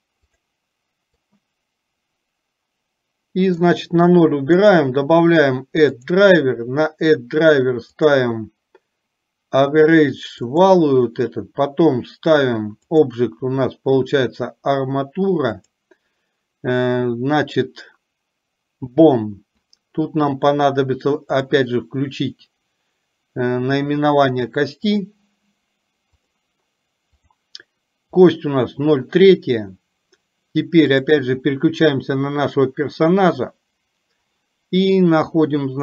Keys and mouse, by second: 1.5-3.7 drag, 4.6-19.8 right drag, 21.5 click, 25.0 click, 26.2 click.